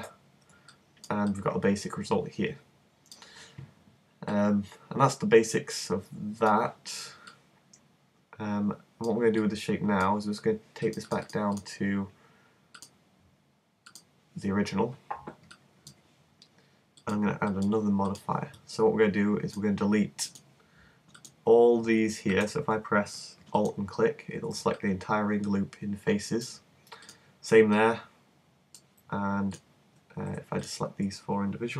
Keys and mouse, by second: 0.0 Escape, 5.6 middle click, 7.4-9.7 middle drag, 10.9-15.8 middle drag, 17.0 click, 19.1 middle click, 20.3-21.8 drag, 26.4-30.6 middle drag, 30.6-31.7 drag.